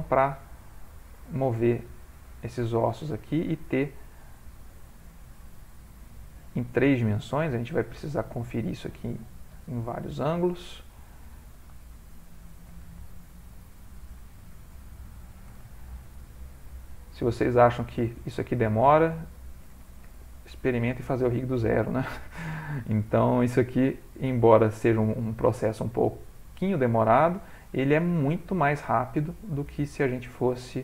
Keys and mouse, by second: 0.5 g, 1.9 click, 2.2 g, 3.5 click, 4.4 g, 5.5 middle click, 7.3 click, 8.0 shift+middle click, 8.2 shift+middle click, 8.6 g, 9.5 r, 10.1 g, 11.3 click, 11.9 shift+click, 12.3 click, 13.0 g, 14.8 shift+click, 16.7 click, 17.0 click, 17.2 shift+click, 18.4 shift+click, 19.0 click, 20.0 g, 21.1 r, 21.7 g, 22.7 click, 23.6 middle click, 24.3 click, 24.8 shift+click, 25.1 click, 25.5 middle click, 26.9 click.